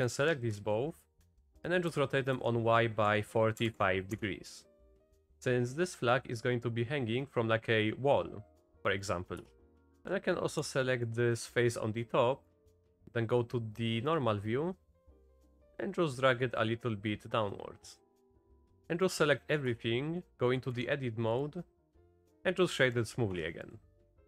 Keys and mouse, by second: 0.1-0.6 drag, 1.1 click, 1.5 r, 1.9 r, 9.0 click, 9.4 Tab, 9.9 z, 9.9 click, 9.9 z, 10.6 3, 10.9 click, 12.5-14.2 drag, 15.0 z, 15.5 click, 16.2-18.4 drag, 18.7 shift+click, 18.8 Tab, 18.8 a, 19.7 Tab, 20.3 a, 20.7 3, 21.5-23.0 right drag, 23.3 Tab.